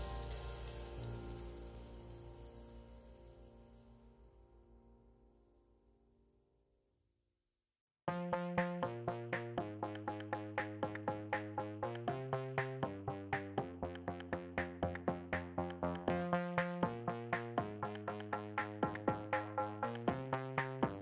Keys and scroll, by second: 0.9 2, 4.6 space, 5.5 space, 6.4 space, 12.5 space.